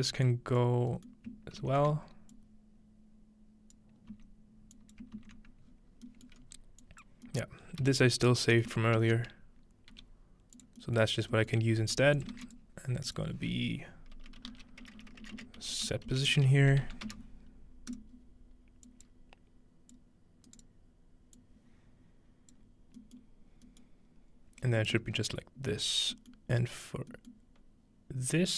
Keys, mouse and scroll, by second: 0.3-2.2 drag, 1.1-1.9 ctrl+middle drag, 2.3-4.1 ctrl+drag, 4.1 x, 4.7-5.7 drag, 5.7-6.4 scroll down 1, 6.3-6.9 middle drag, 6.4 scroll up 1, 6.9 drag, 7.6-9.7 scroll up 2, 7.8 f, 9.0 ctrl+z, 9.9 ctrl+g, 10.6-11.8 drag, 11.2-11.8 scroll up 1, 11.8-12.9 typing, 12.5 shift+click, 13.1 click, 14.4-16.8 typing, 16.8 End, 17.9 click, 18.9 click, 19.9-20.7 drag, 20.5 right click, 21.4-22.6 drag, 24.0-24.6 scroll up 2, 24.6-25.1 scroll down 2, 25.1 scroll up 2, 25.3-25.9 scroll down 2, 25.9-28.1 scroll up 2.